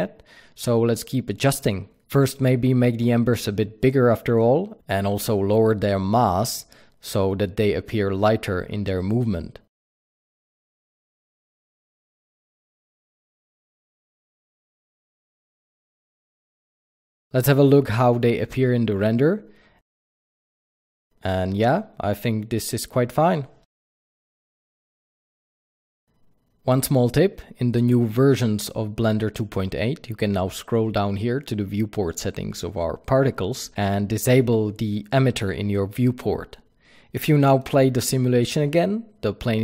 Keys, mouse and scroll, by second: 3.8-9.6 drag, 4.5 KP_Enter, 11.3-16.7 drag, 13.0 KP_Enter, 16.4 KP_Enter, 16.7-18.5 alt+middle drag, 16.9 ctrl+b, 19.1 click, 19.3 click, 26.0 scroll down 1, 26.2 click, 30.2-32.5 scroll down 1, 32.5 click, 32.8-33.8 scroll down 1, 33.8 click, 36.4-39.6 drag.